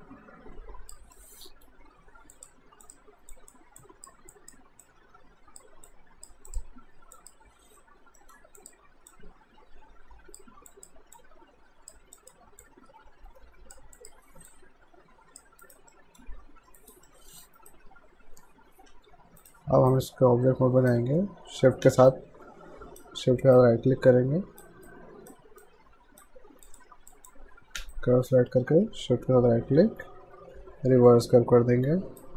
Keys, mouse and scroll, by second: 1.2 alt+middle click, 2.3 click, 8.2 alt+middle click, 8.6 click, 15.6 alt+right click, 15.9 alt+middle click, 16.8 alt+right click, 17.1 alt+middle click, 17.6 alt+right click, 18.9 q, 19.4 right click, 22.1 shift+right click, 26.7 click, 27.1 click, 28.0 shift+right click.